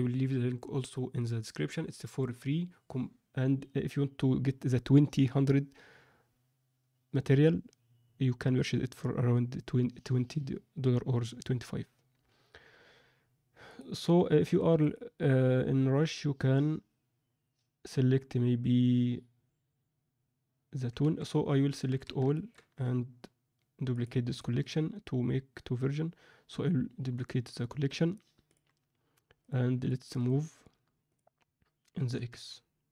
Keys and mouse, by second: 13.6-14.4 drag, 14.7-21.1 drag, 21.8 a, 22.3 ctrl+middle click, 24.5-28.5 right drag, 30.1-31.1 right drag, 31.9 g.